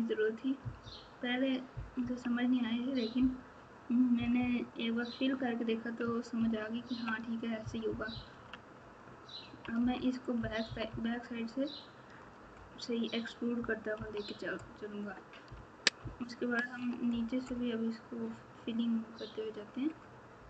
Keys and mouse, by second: 0.6 KP_6, 0.8 KP_6, 2.0 KP_3, 4.1 KP_Add, 4.3 KP_Add, 6.3 ctrl+KP_2, 6.8 ctrl+KP_2, 7.6 KP_6, 7.8 KP_6, 8.8 ctrl+KP_6, 9.8 KP_6, 13.9 KP_3, 16.0 ctrl+KP_2, 16.5 ctrl+KP_2.